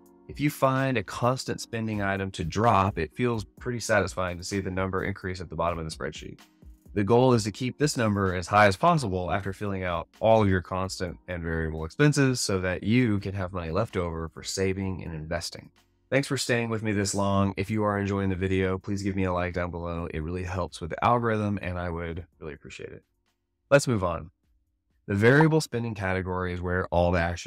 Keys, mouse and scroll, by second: 22.2 click.